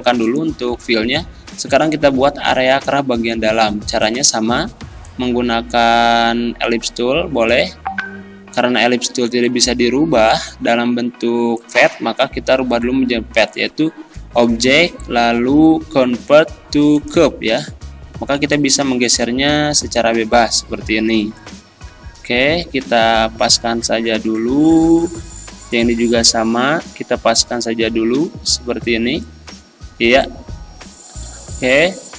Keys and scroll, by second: 9.1 z.